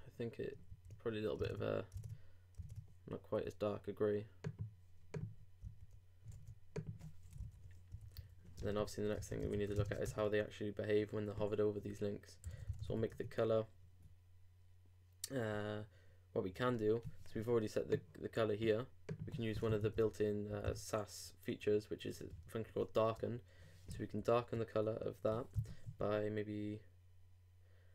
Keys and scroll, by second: 0.7 alt+super+f, 1.4 alt+super+Tab, 1.9 super+Tab, 6.3 super+z, 7.3 super+BackSpace, 7.4 super+v, 7.9 super+;, 8.4-9.8 typing, 10.0 shift+Return, 22.4 shift+9, 23.9 shift+super+v, 25.5 super+,.